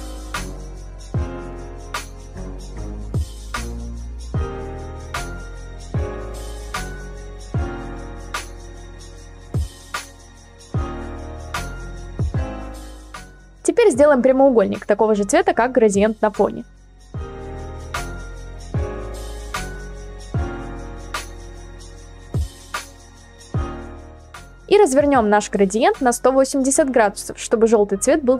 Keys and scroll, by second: 4.7 ctrl+t, 5.5 Return, 23.1 ctrl+t, 23.5 Return, 24.1 ctrl+z, 27.4-28.2 typing.